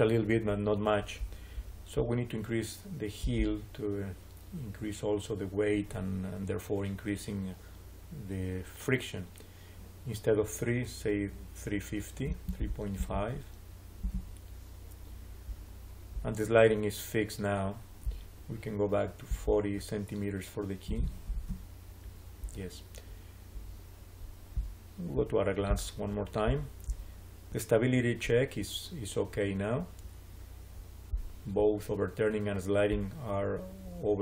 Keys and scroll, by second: 11.9-13.4 typing, 13.9 Return, 20.8 4, 21.2 Return.